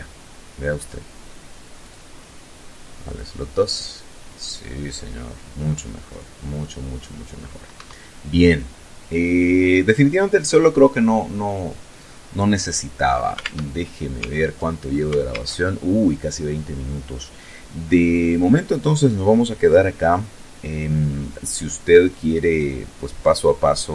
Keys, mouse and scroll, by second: 0.7 click, 1.9 click, 6.6 Escape, 12.3 alt+Tab, 13.0 alt+Tab, 14.1 alt+Tab, 23.7 ctrl+Left.